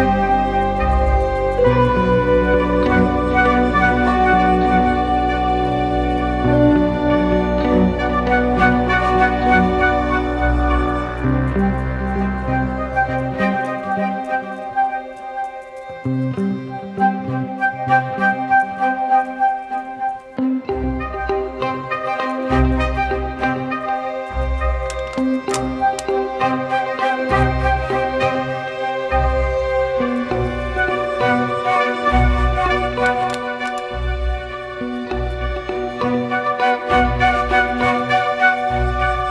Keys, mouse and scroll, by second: 2.0 double click, 10.1-11.5 scroll down 1, 18.3-21.1 scroll down 1, 23.4-24.4 typing, 38.5-39.3 typing.